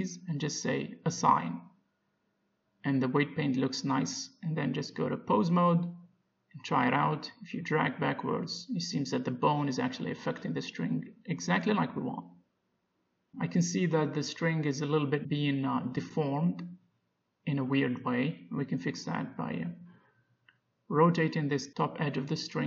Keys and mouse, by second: 0.3 z, 2.3-3.4 drag, 3.4 Tab, 3.8 Tab, 7.5 click, 8.0 g, 17.2 middle click, 18.1 ctrl+z, 18.9 middle click, 19.3 click, 19.7 middle click, 20.9 middle click, 21.3 middle click, 22.0 Tab.